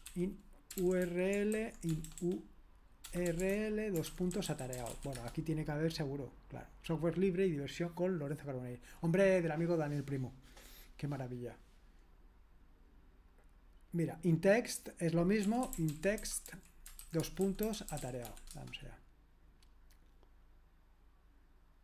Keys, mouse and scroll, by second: 0.0-5.4 typing, 13.3 click, 14.5 click, 15.2-19.0 typing.